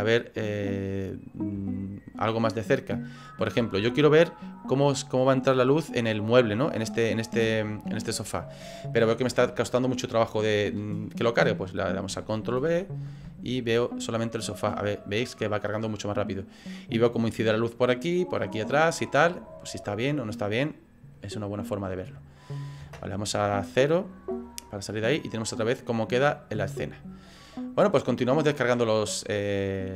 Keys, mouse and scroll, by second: 1.3 scroll up 3, 1.8 shift+middle click, 2.9 middle click, 3.7 shift+middle click, 6.1 middle click, 7.5 shift+middle click, 12.6 ctrl+b, 22.8 KP_0, 24.2-25.3 scroll down 5, 25.3-25.8 scroll up 1, 27.6-28.2 scroll up 1, 28.2 click.